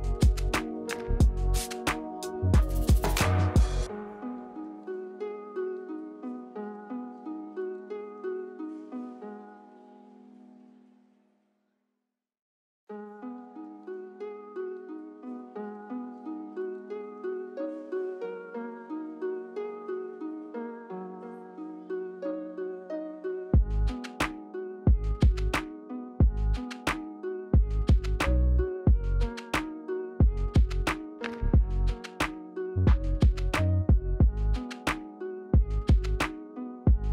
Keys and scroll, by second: 9.6 ctrl+z, 26.0 e, 27.2 e, 28.6 w, 33.9 b, 35.2 e.